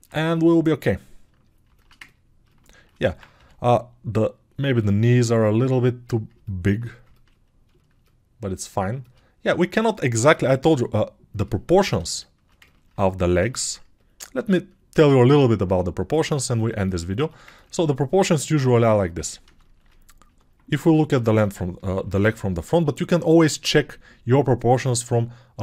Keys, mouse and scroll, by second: 9.7 alt+q, 10.3 g, 22.0 ctrl+shift+7.